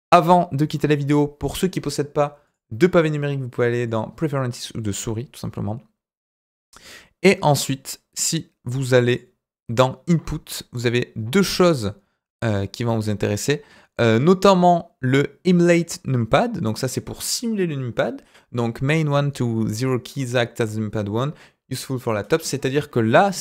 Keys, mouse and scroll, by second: 0.2-0.6 middle drag, 0.6-1.0 scroll down 3, 2.4-3.9 drag.